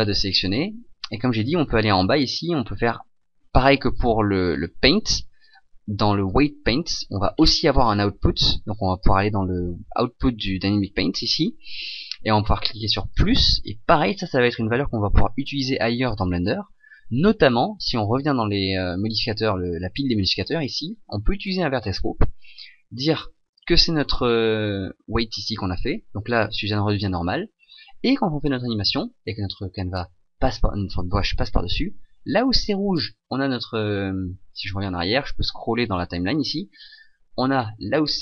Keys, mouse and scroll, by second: 30.2 a, 34.6 Escape, 36.2 click.